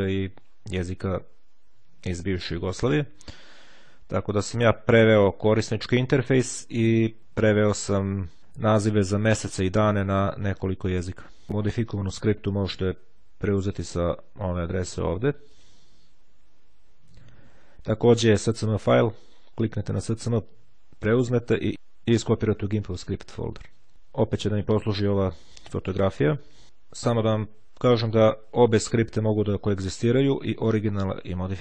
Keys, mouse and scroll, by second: 0.5 scroll down 2, 2.1-3.1 scroll up 1, 3.1-3.6 scroll up 1, 3.6-4.2 scroll up 1, 4.4-4.8 scroll up 1, 6.6-8.4 scroll up 2, 8.9-10.6 scroll up 2, 14.6 click, 23.9 click, 27.4-28.6 drag.